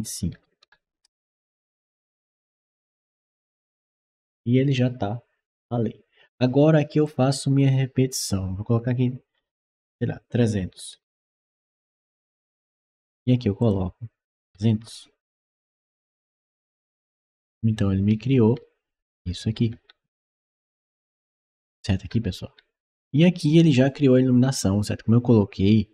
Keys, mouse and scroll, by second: 0.2 2, 0.6 5, 0.9 Return, 1.7-3.8 right drag, 2.1 w, 3.1 s, 6.9 click, 10.8 3, 11.3 0, 12.1 Return, 13.4 click, 14.3 2, 15.3-16.3 typing, 16.9 Return, 17.6-23.3 right drag, 18.0-20.4 typing, 22.0 s, 22.7 w.